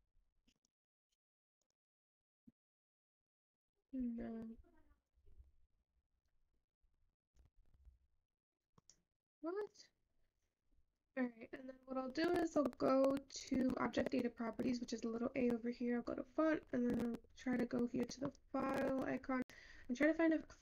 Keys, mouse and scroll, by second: 7.7 ctrl+z, 12.3-17.2 scroll up 7.